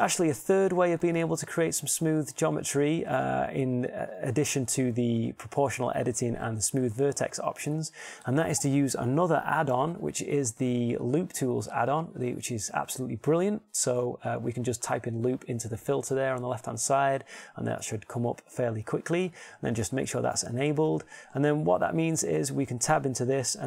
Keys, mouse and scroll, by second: 23.3 Tab.